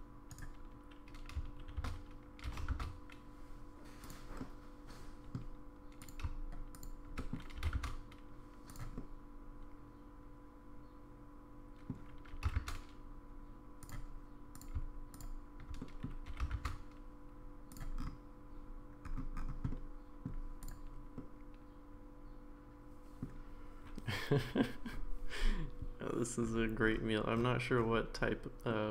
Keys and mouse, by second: 1.8 shift+d, 4.4-5.3 middle drag, 6.8 shift+click, 7.2 middle click, 7.6 g, 9.0-11.9 middle drag, 12.3 g, 15.1 click, 15.8 middle drag, 16.3 g, 19.7-20.3 middle drag, 21.2-23.2 middle drag, 28.7-28.9 middle drag.